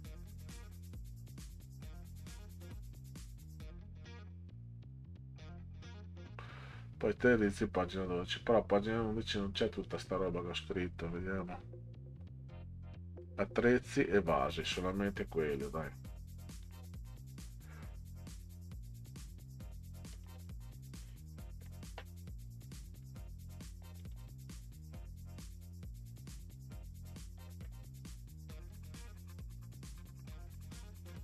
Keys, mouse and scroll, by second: 8.4-8.9 scroll down 4, 9.8 click, 11.5-11.9 scroll down 4, 12.6 scroll down 2, 15.1-15.7 scroll up 4, 16.6 click, 16.9 click, 18.3 click, 18.5 click, 20.1 click, 20.4 click, 23.0 click, 24.0 click, 24.2 click, 25.4-27.1 drag, 27.4 Delete, 28.7 Delete.